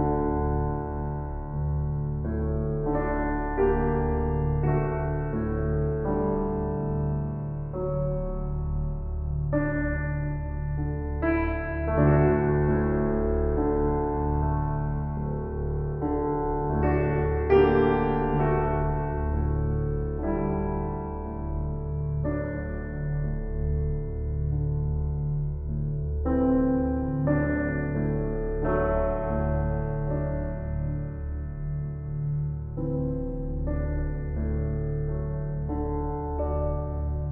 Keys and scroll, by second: 25.2 F4.